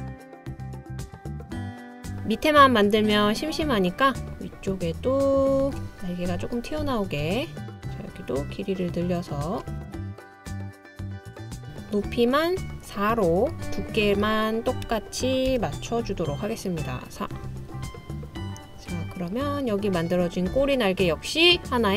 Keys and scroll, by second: 2.3 super+c, 2.6 super+v, 9.3 Page_Down, 14.9 4, 15.5 Return.